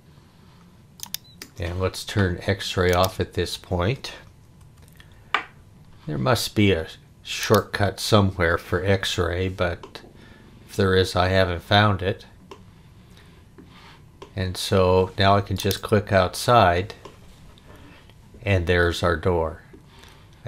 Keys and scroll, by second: 4.6 x.